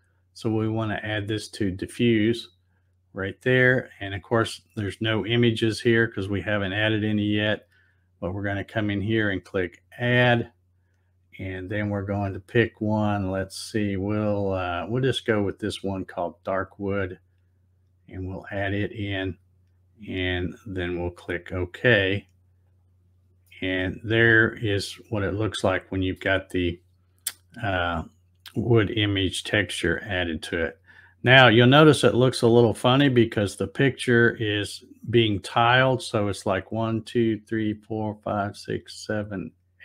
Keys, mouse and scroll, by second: 1.9 click, 9.7 click, 16.3 click, 18.1 click, 21.2 click, 22.6 click, 23.5-26.2 middle drag.